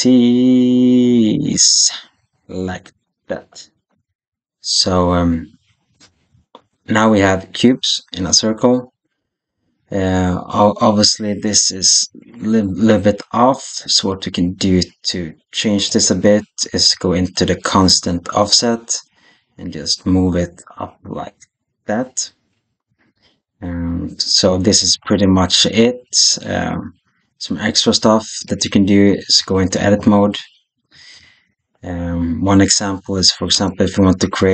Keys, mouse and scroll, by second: 6.5 shift+click, 15.7 click, 18.4-22.8 drag, 28.3-29.4 middle drag, 29.6 Tab, 31.0 alt+a, 33.4 3.